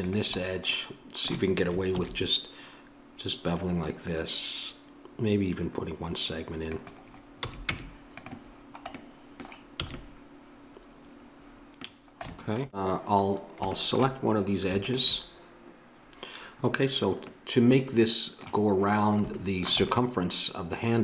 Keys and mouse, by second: 1.9 ctrl+b, 7.4 a, 7.7 Tab, 9.8 a, 14.8 click, 15.0-21.0 middle drag.